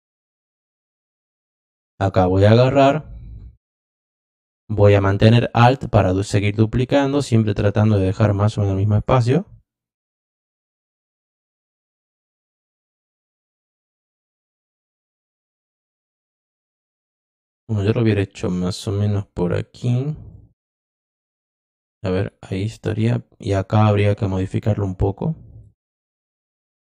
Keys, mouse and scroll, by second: 1.9 click, 5.4-8.9 alt+drag, 10.1 click, 14.1 click, 15.4-16.4 drag, 17.2 click, 18.1-19.1 drag, 20.3 click, 21.6 click, 24.4-25.6 drag.